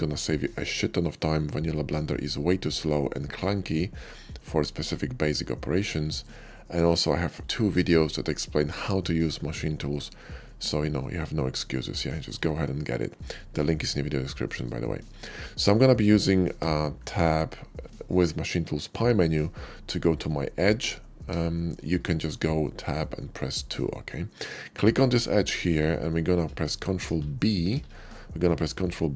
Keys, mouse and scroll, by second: 0.0-4.0 middle drag, 4.6-6.0 middle drag, 6.4 shift+middle click, 6.9-7.4 shift+middle drag, 9.2 middle click, 10.6-11.7 middle drag, 12.0 shift+middle click, 12.3-12.7 shift+middle drag, 12.9 shift+middle click, 14.2 shift+middle click, 16.5 Tab, 17.2 Tab, 24.5 click, 25.0-26.2 middle drag, 27.0 KP_5, 28.4 ctrl+b.